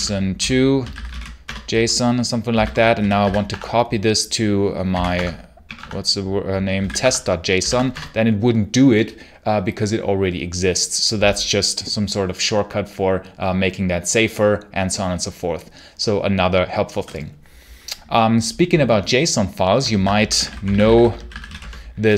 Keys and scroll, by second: 0.0-3.6 typing, 4.8-7.4 typing, 5.0 Tab, 5.6 Tab, 7.5 Tab, 7.8 Return, 19.8-22.1 typing.